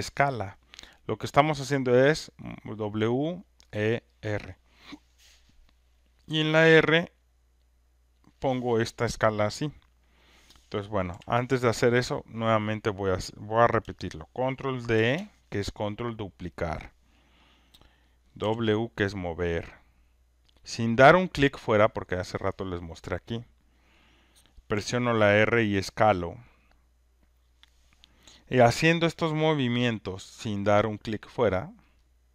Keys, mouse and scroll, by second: 1.3 click, 3.6 click, 4.4 click, 8.3 click, 11.1 Delete, 12.2 click, 14.9 ctrl+d, 18.4 w, 20.8 click, 25.3 click, 27.4 click, 30.0 alt+middle click, 31.0 alt+click, 31.8 alt+right click.